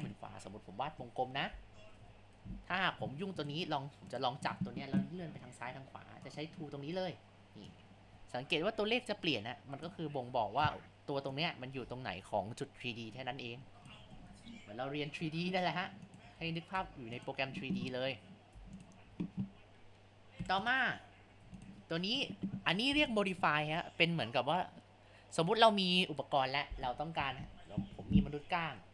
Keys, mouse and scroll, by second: 1.1 click, 2.0 Tab, 2.1 Tab, 3.5 click, 4.1-7.8 drag, 10.6 ctrl+z, 11.3 click, 14.2 ctrl+z, 15.2 g, 16.4 ctrl+z, 16.8 Tab, 18.5 Tab, 19.1 a, 20.4 Delete, 21.3 Tab, 22.2 click, 23.0 click, 27.7-28.9 drag.